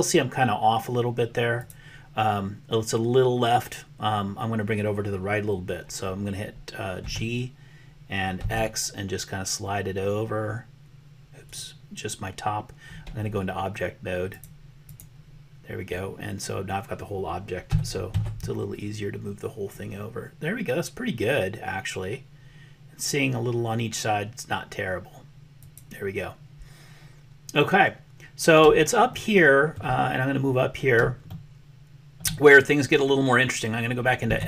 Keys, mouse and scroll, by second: 7.0 g, 14.3 click, 17.7 g, 29.2 shift+click, 31.4 shift+click, 31.5 shift+middle click, 31.7 shift+click, 31.8 shift+middle click, 32.0 shift+middle click, 32.1 shift+click, 34.3 Tab.